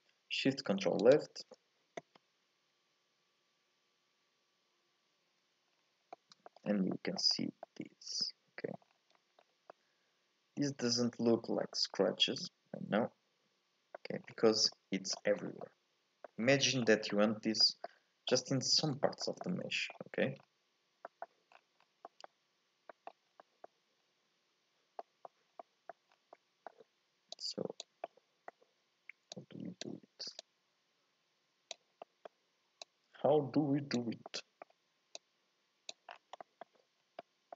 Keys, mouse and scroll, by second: 5.7-6.1 scroll down 3, 6.1 middle click, 6.7 scroll up 1, 6.9 shift+middle click, 7.3-7.6 scroll up 2, 7.6-8.8 middle drag, 8.8-9.2 scroll down 1, 9.2 middle click, 9.4-9.7 scroll up 3, 9.7-12.7 middle drag, 14.2-14.7 scroll down 3, 14.7 middle click, 15.3 scroll up 3, 15.6-17.0 middle drag, 17.0 scroll up 1, 17.1-19.9 middle drag, 19.9-20.4 scroll up 1, 20.4-21.1 scroll down 2, 21.1 middle click, 21.5 scroll down 1, 22.0 scroll up 1, 22.0 middle click, 22.7 scroll up 1, 22.9 middle click, 23.3 scroll up 2, 23.4 middle click, 24.0-25.0 scroll up 2, 25.0 middle click, 25.5-26.1 scroll up 2, 25.6 middle click, 26.1 scroll down 2, 26.4 middle click, 27.3 click, 28.0-29.3 middle drag, 29.3 click, 30.4-32.0 drag, 32.0 middle click, 32.8 click, 34.3 middle click, 35.1 click, 36.1 scroll down 1, 36.4 middle click, 36.9 scroll up 1, 37.2 middle click.